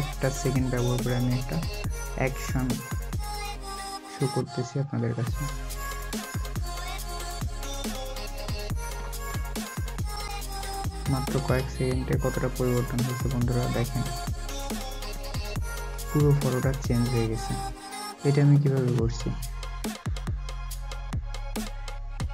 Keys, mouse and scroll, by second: 9.7 alt+scroll up 1, 10.8-11.1 alt+scroll down 1, 13.4-14.0 alt+scroll up 1, 14.0 alt+scroll down 1, 14.2 alt+scroll up 1, 16.7 alt+scroll down 1.